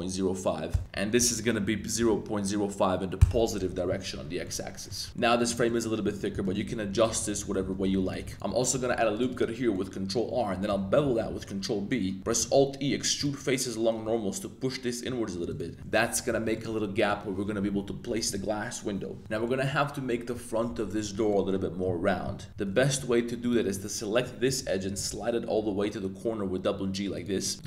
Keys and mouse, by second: 0.7 Return, 0.8-2.2 typing, 3.2 Return, 3.7 z, 4.1 Tab, 4.4-4.9 middle drag, 5.0 Tab, 5.1 middle click, 5.1-7.7 typing, 5.4 middle click, 5.7 middle click, 8.1 click, 8.2 middle click, 8.7 super+r, 9.3 click, 9.7 middle click, 11.0 super+b, 12.2 alt+super+e, 15.8 Tab, 15.8-16.3 middle drag, 16.5 shift+middle drag, 16.7 click, 16.9 click, 19.2 Tab, 19.2 middle click, 19.5 Tab, 19.5 middle click, 21.3 middle click, 22.4 middle click, 22.5 Tab, 22.7 middle click, 23.0-25.1 typing, 23.4 click, 23.7 middle click, 27.2 click, 27.4 middle click, 27.5 click.